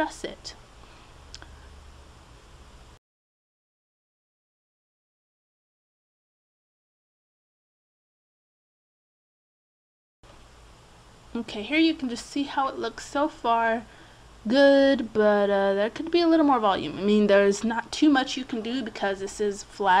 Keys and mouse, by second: 4.6 Tab, 5.4 click, 6.4 middle click, 7.3 click, 8.0 middle click, 8.6 click, 9.1 middle click, 9.9 click, 13.1-15.3 middle drag, 15.8-17.2 drag, 17.2 middle click, 19.0 click.